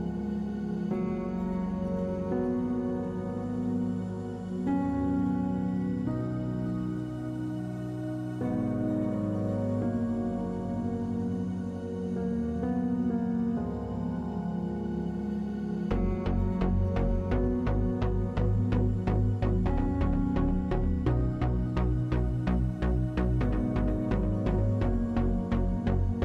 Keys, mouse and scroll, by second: 1.5-3.2 middle drag, 1.7 w, 3.2 click, 4.1 Tab, 4.9 z, 5.4 z, 6.1 u, 11.4 click, 11.8 Tab, 12.4 Tab, 12.9 z, 13.4 z, 15.6 u, 16.3 Tab, 24.2 a, 25.2 middle click.